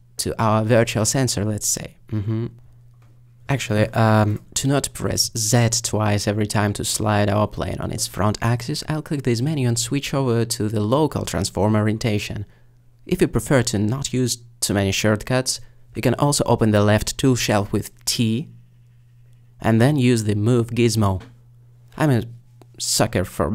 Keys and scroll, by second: 15.8 t.